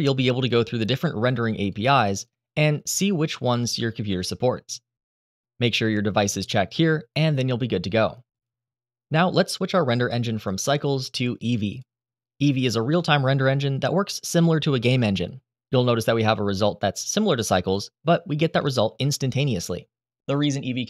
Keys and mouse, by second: 10.5-11.7 drag, 18.3-19.9 middle drag.